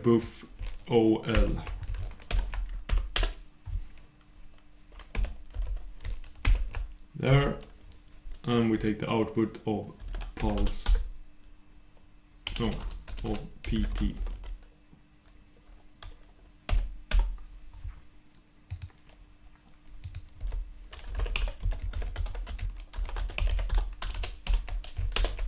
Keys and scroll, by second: 9.4 super+\, 25.3 shift+super+Return.